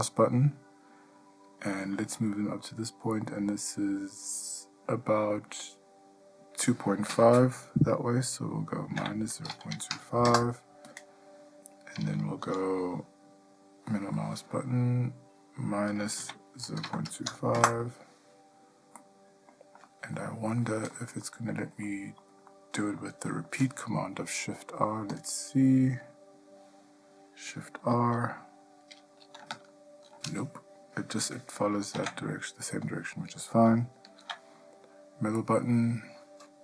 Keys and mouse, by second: 12.6 g, 19.2-19.7 middle drag, 20.1-20.4 shift+middle drag, 20.8 middle click, 21.4-21.8 shift+middle drag, 22.0-22.4 middle drag, 22.9 shift+middle drag, 23.8-24.7 shift+middle drag, 25.3 click, 29.7 shift+r, 32.2 ctrl+z, 33.0 click, 34.2 g.